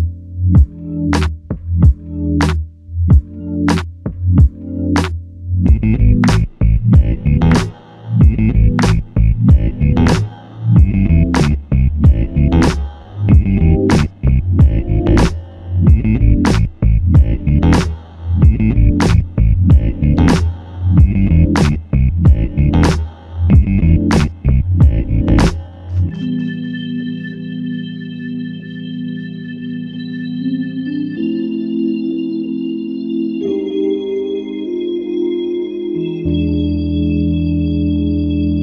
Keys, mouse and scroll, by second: 5.6 alt+m, 8.7 typing, 9.9 shift+click, 12.1 typing, 15.3 double click, 22.1 f, 23.8 double click, 25.0 alt+click, 29.0 shift+click, 30.6 alt+shift+click, 34.6 typing, 36.0 alt+shift+click, 38.5 alt+click.